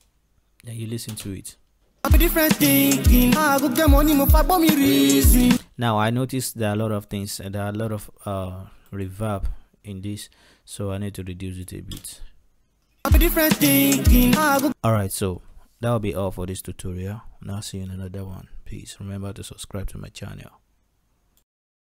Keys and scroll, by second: 1.3 space, 5.6 space, 11.9 space, 14.4 space.